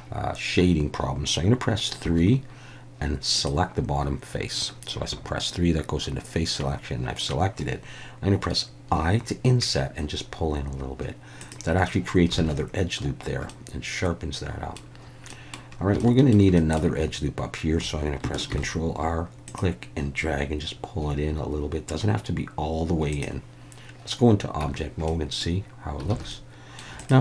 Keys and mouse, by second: 2.0 3, 8.9 i, 11.4 click, 12.4 alt+a, 13.5-14.8 middle drag, 15.3 middle click, 16.0 shift+middle click, 16.5 middle click, 18.5 ctrl+r, 23.1 click, 24.6 Tab, 25.1-25.4 middle drag, 26.1 alt+a, 26.3-26.8 middle drag.